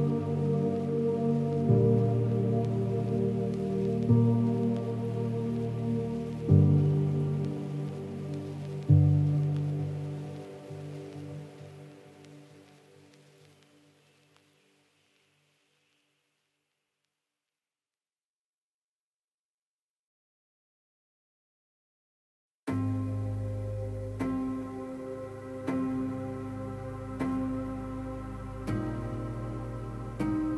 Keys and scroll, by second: 15.5 ctrl+z, 22.2 ctrl++.